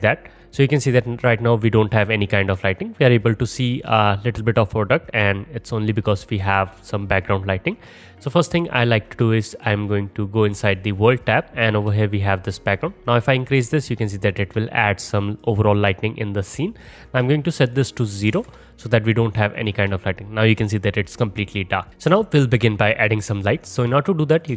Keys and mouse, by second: 9.5 click, 9.7-12.6 middle drag, 12.6-17.3 drag, 17.3 middle click, 17.7-19.7 drag, 19.7-24.2 middle drag, 24.2 click, 24.3 shift+middle click.